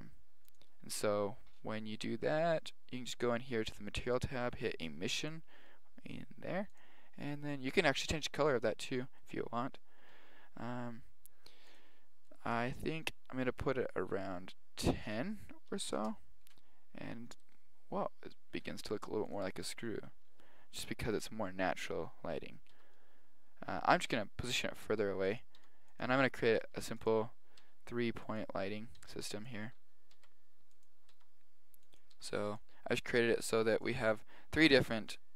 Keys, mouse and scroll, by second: 4.2-6.9 drag, 8.8-10.1 middle drag, 10.1 KP_7, 17.0-19.4 drag, 20.0-20.9 drag, 20.9 KP_7, 21.7-22.8 drag, 22.8 g, 24.6 r, 25.7 g, 26.6 shift+d, 27.7 r, 29.0 r, 30.2 shift+d, 31.2 r, 32.2 g, 33.4 g.